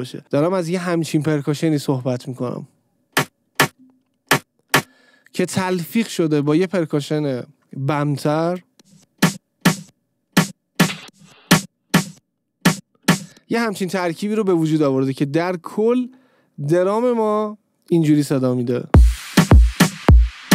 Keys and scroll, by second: 2.8 space, 5.1 space, 8.8 space, 13.4 space, 19.0 space.